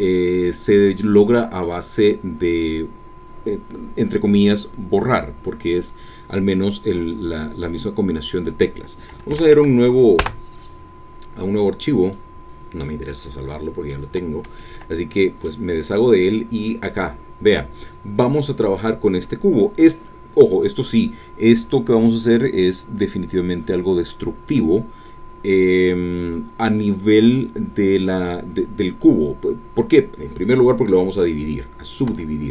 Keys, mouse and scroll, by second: 9.3 ctrl+n, 10.7 Return, 12.0 click, 13.1 middle click, 14.6-15.6 shift+drag, 16.0-18.2 middle drag, 18.2-32.1 drag, 32.2 Tab.